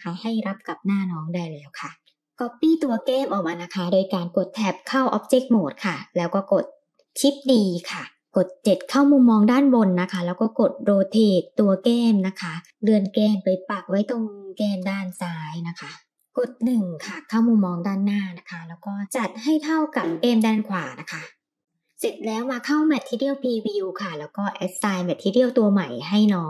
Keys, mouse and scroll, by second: 0.9-2.0 middle drag, 2.0 ctrl+z, 2.0 Tab, 2.0 click, 2.5 click, 4.2 KP_7, 6.9 shift+d, 10.0 r, 12.5 g, 14.4 r, 16.2 KP_1, 18.3 r, 20.8 g, 21.6 middle click, 21.6 r, 22.7 click, 24.8 click, 25.5-26.4 drag.